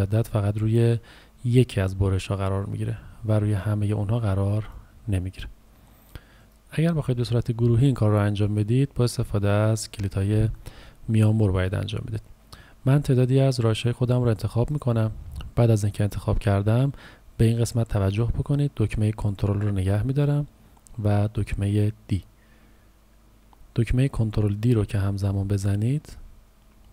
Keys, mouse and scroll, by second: 7.6 Delete, 8.4 click, 9.5 Delete, 13.4 click, 22.1 ctrl+d, 24.3 ctrl+d, 24.9-26.1 typing.